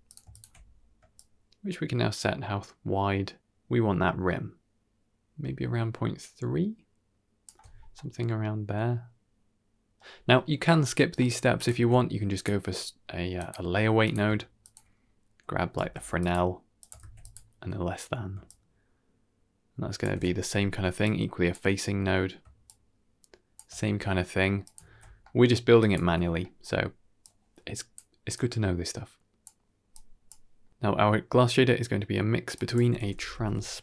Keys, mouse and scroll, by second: 0.2 ctrl+shift+click, 1.0-7.4 shift+drag, 7.8-9.8 middle drag, 10.6 middle click, 11.1 middle click, 11.4 click, 11.6 shift+a, 14.5 ctrl+shift+click, 15.7 g, 16.7 click, 16.9 shift+d, 18.3-19.9 shift+drag, 20.9-21.4 drag, 22.5-23.5 shift+drag, 24.5 click, 24.8 ctrl+x, 25.1 middle click, 25.7-26.0 drag, 26.0 x, 26.3 middle click, 27.1 click, 28.2-29.3 drag, 29.8 click, 30.5 middle click, 32.2 middle click, 32.4-33.8 drag.